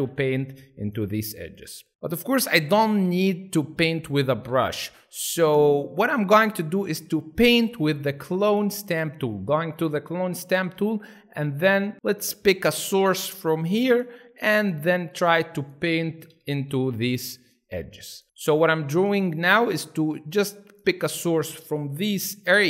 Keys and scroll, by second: 0.0-0.7 typing, 4.2 ctrl+alt+z, 5.2 alt+space, 10.8 s, 16.0 ], 16.2 ], 16.4 ], 16.7 ], 18.2 space, 22.3 F3.